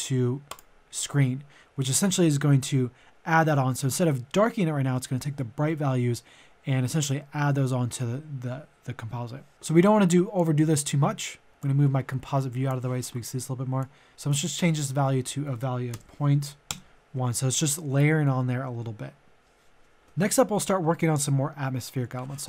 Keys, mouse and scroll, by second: 14.2 ctrl+a, 14.6 KP_Decimal, 15.0 KP_0, 15.9 BackSpace, 16.3 KP_1, 20.0 click.